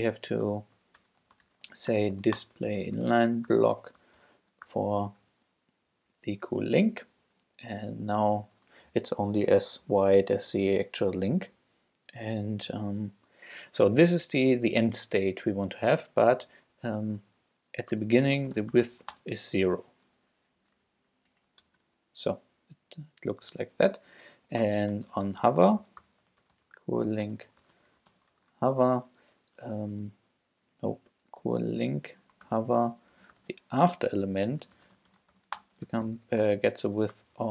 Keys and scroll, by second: 1.0-4.7 typing, 18.0 Return, 18.1-20.0 typing, 20.6 Up, 20.9 super+Left, 21.3 shift+super+Right, 21.6 shift+super+BackSpace, 24.9 Return, 25.0-28.5 typing, 28.5 shift+Return, 29.5 Return, 30.6 Up, 30.9 alt+Right, 32.4 alt+shift+Right, 32.5 alt+shift+;, 32.9-37.5 typing.